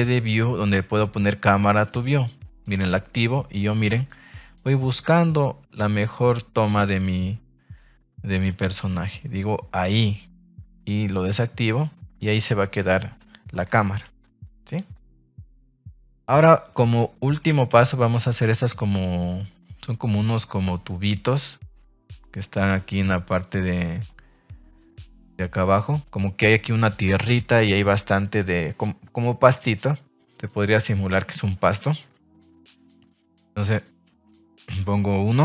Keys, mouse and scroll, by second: 1.8 click, 6.1 middle click, 11.2 click, 13.5 shift+middle click, 14.0 ctrl+s.